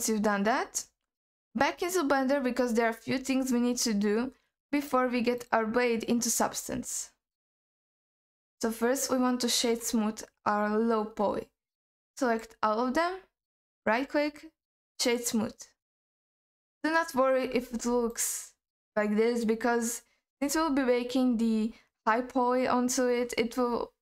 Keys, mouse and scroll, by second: 1.4 scroll down 1, 1.7-3.7 scroll up 3, 3.7-4.7 scroll up 4, 4.8-5.6 drag, 6.1 scroll down 1, 6.5 scroll up 1, 8.3 scroll down 2, 11.8 click, 13.8 right click, 15.8-16.3 scroll up 1, 16.3-17.1 scroll down 2, 17.1-17.5 scroll down 2, 17.5-17.9 scroll up 2, 17.9-20.5 alt+middle drag, 21.1-21.6 scroll down 2, 21.6-23.3 scroll up 1, 23.3-24.0 scroll down 2.